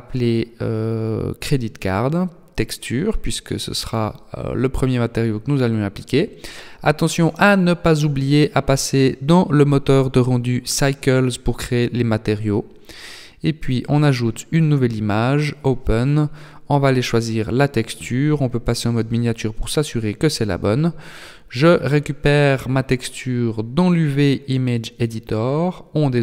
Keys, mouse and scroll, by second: 6.4 click, 9.6 click, 10.8 click, 13.6 click, 18.8 click, 20.4 click, 22.5 click, 24.5-25.4 scroll down 9, 25.4 shift+middle click.